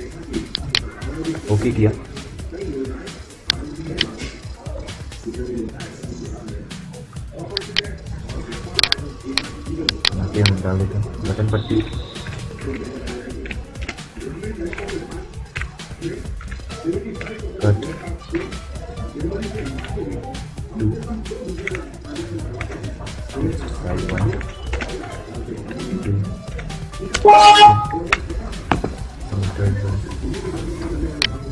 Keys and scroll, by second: 11.3-15.4 typing, 16.1 Tab, 16.9 c, 17.6 u, 18.0 t, 19.3 -, 20.4 2, 21.3 Tab, 23.3 1, 23.8 Tab, 24.5 space, 24.8 Tab, 25.7 2, 26.2 Tab, 26.9 Return, 27.8 Return.